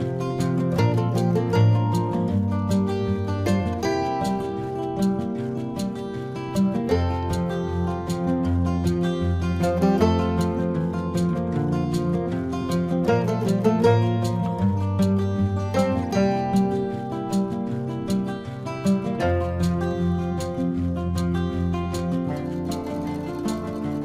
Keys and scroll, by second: 16.9 space.